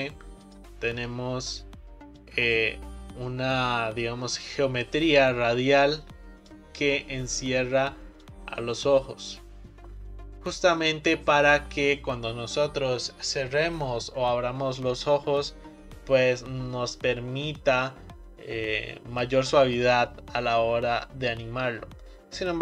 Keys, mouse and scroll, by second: 0.5 click, 0.9-2.3 scroll down 1, 2.3-5.2 drag, 8.2-11.3 drag.